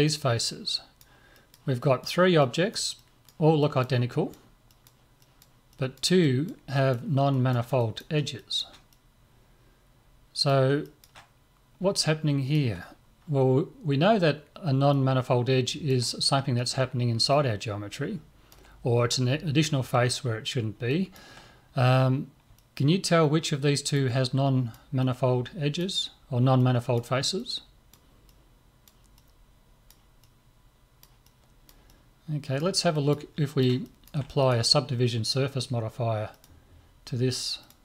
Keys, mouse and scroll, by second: 14.2-16.8 middle drag, 17.3-19.2 middle drag, 20.9-36.0 middle drag, 34.4 right click, 37.7 click.